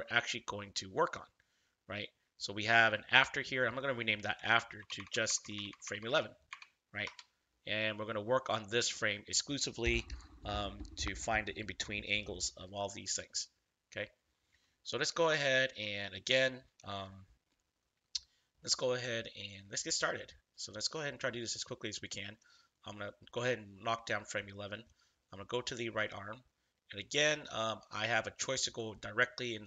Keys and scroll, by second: 4.7-6.4 typing, 7.0 Return.